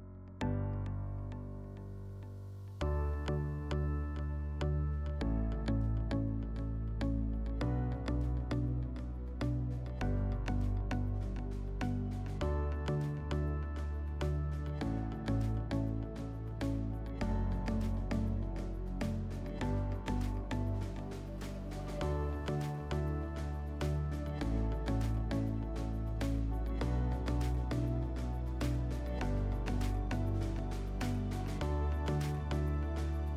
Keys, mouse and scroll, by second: 0.4 click, 1.4 click, 3.1 click, 4.3 click, 5.2 click, 5.7 click, 5.9 click, 6.2-9.2 typing, 9.5 Return, 11.0 click, 11.2 click, 11.8-13.1 typing, 12.1 Tab, 12.2 Tab, 12.8 Tab, 12.9 Tab, 14.1 click, 16.9 click, 18.2 click, 18.4 click, 19.0 3, 19.3 Tab, 19.7 Tab, 21.6-23.6 drag, 25.7 click, 26.4-27.8 typing, 26.7 Tab, 26.8 Tab, 29.1 click, 31.1 click, 32.5 click.